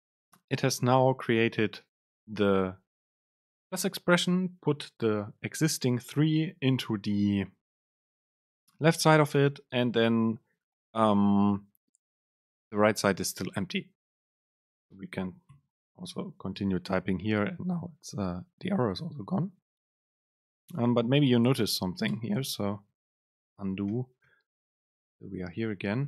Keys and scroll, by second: 21.4 shift+Left, 22.2 BackSpace, 23.3 super+z.